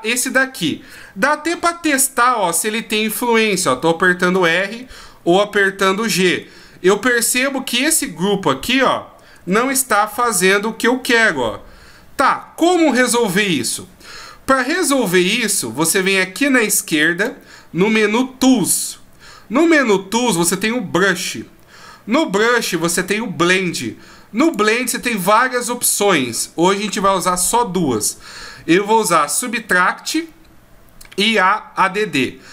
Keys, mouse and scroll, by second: 1.6 r, 4.7 g, 7.1 shift+scroll up 1, 7.9 shift+scroll up 2, 9.4 g, 14.9-17.2 scroll up 2, 17.2 click, 17.2-17.5 scroll up 1, 24.4 click.